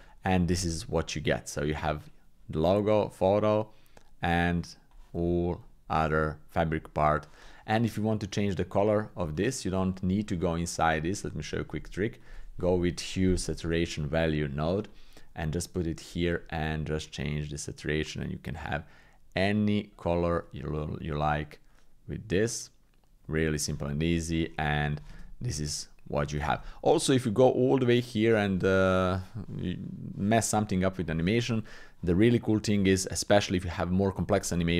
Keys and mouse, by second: 1.3-4.9 drag, 8.3 click, 9.3 click, 10.8 click, 11.7 shift+a, 15.6 click, 17.0-23.7 shift+drag, 24.3 click, 27.1-31.0 drag, 27.1 shift+space.